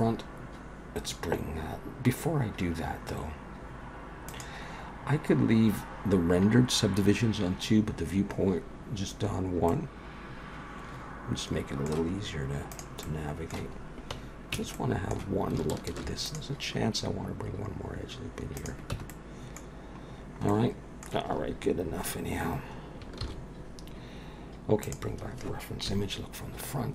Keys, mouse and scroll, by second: 4.3 click, 7.9-9.1 scroll up 2, 9.1-9.7 scroll down 1, 9.7 middle click, 12.1-12.7 scroll up 1, 12.7 click, 12.7-13.0 scroll up 2, 13.0 middle click, 13.7-14.5 scroll up 1, 14.5 Tab, 14.5 scroll up 1, 14.7 middle click, 15.9 ctrl+r, 18.9 Tab, 19.1 middle click, 19.7-22.0 scroll down 6, 20.5 middle click, 23.2 ctrl+s, 24.8 click, 25.9 KP_1, 26.7-26.9 scroll down 4.